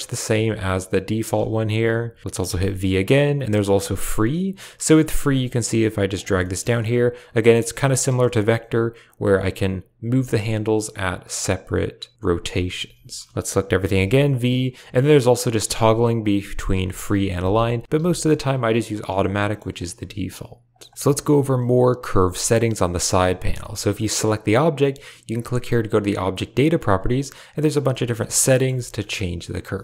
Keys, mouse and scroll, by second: 0.0 click, 0.2 r, 1.6 a, 1.7 a, 2.3 v, 4.4 click, 5.0 g, 6.3 shift+middle click, 7.3 click, 7.6 g, 8.1 shift+middle click, 10.0 g, 12.7 a, 12.9 a, 13.2 shift+click, 13.8 v, 15.5 v, 16.6 v, 17.3 v, 17.8 a, 17.8 c, 19.0 v, 19.3 shift+click, 19.8 r, 20.8 shift+middle click, 20.9 shift+middle click, 22.7 Tab, 23.4 g, 25.7 click, 26.5 click, 27.9 shift+middle click, 28.2 middle click, 28.5 shift+middle click, 29.0 shift+middle click.